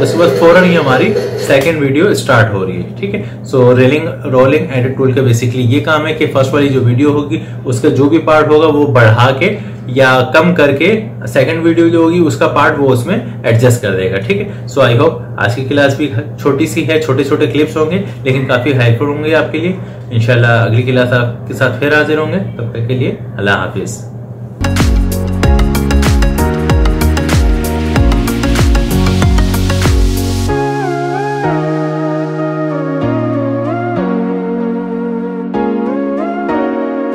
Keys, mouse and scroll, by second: 1.8 space.